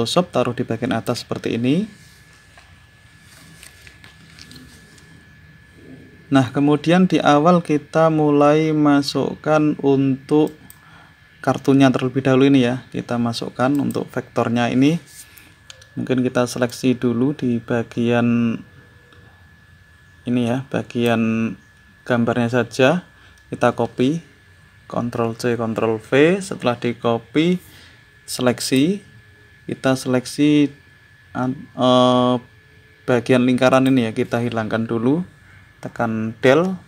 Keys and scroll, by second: 36.1 Delete.